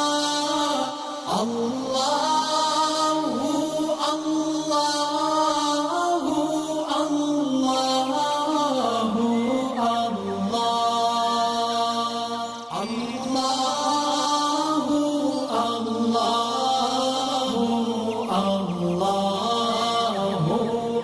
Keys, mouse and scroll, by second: 4.3 alt+scroll up 1, 4.6 click, 7.9 click, 10.3-11.2 drag, 13.1 alt+scroll down 1, 13.9 alt+scroll up 1.